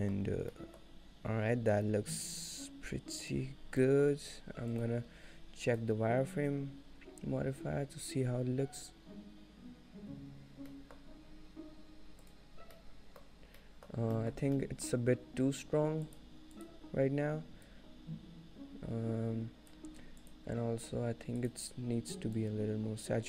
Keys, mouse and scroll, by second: 0.3 scroll up 2, 0.6 shift+middle click, 0.8 shift+middle click, 1.8 shift+click, 2.1 shift+click, 3.7 scroll down 1, 3.9 middle click, 4.8 click, 10.8 middle click, 11.2-11.6 scroll up 3, 12.3 scroll down 2, 12.7 click, 13.0 middle click, 13.8 middle click, 14.4 shift+middle click, 14.9 middle click, 16.1 click, 16.8 click, 17.8 shift+click, 18.2 shift+click, 21.5 click.